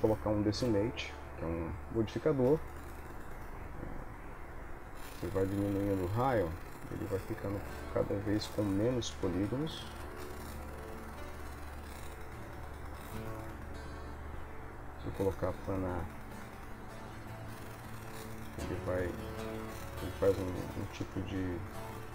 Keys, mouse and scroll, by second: 4.5 click, 8.3 click, 9.5 click, 15.0 click, 17.2 click, 21.6 click.